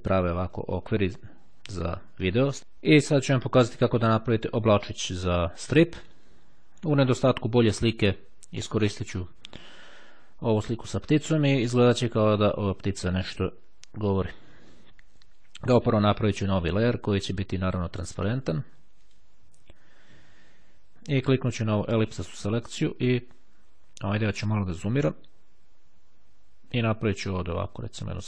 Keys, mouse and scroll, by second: 2.6-3.7 drag, 4.3-6.3 drag, 16.6 click, 19.0 click, 21.3 click, 23.9-24.3 ctrl+scroll up 2, 24.3 ctrl+click, 24.6-25.1 ctrl+scroll down 3, 25.1-25.4 scroll up 2, 25.4 click, 27.0-28.2 drag.